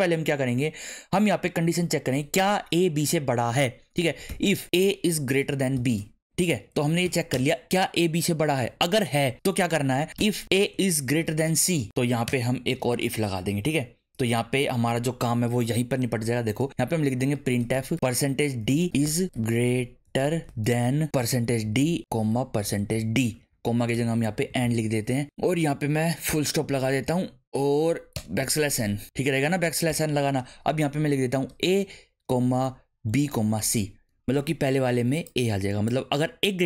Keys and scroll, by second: 3.9-5.7 typing, 6.5 Right, 7.0 shift+[, 7.3 Return, 9.8-11.4 typing, 12.3 Return, 16.7-24.6 typing, 23.3 Left, 26.3 ., 26.7 Right, 27.1 Left, 28.1 \, 28.4 n, 28.7 Right, 29.2 Left, 29.9 ,, 31.5-34.1 typing.